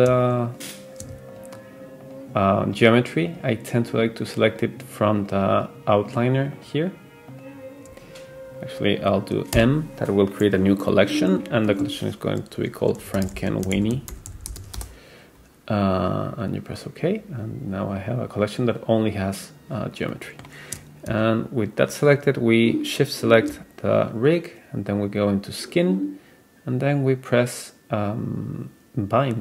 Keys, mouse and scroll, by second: 0.5 shift+click, 1.3 super+click, 2.1 super+click, 2.7 super+click, 3.3 super+click, 3.9 super+click, 4.5 super+click, 5.2 super+click, 6.0 super+click, 6.6 super+click, 7.3 super+click, 9.6 m, 14.4 n, 20.1-20.6 middle drag, 22.9 shift+click, 25.2 click.